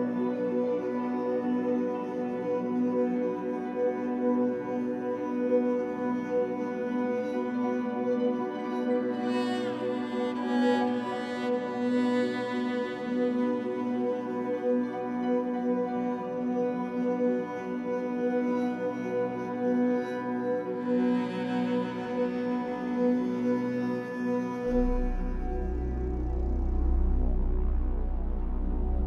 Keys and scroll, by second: 3.6 2, 5.7 w, 10.7 Escape, 16.4 2, 19.3 Escape, 20.0 w, 25.9 Escape.